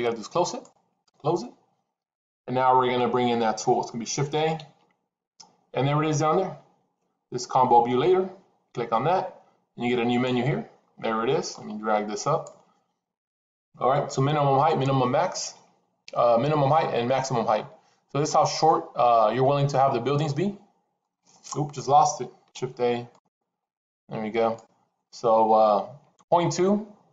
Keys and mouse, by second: 4.5 shift+a, 21.0 middle click, 22.4 shift+a.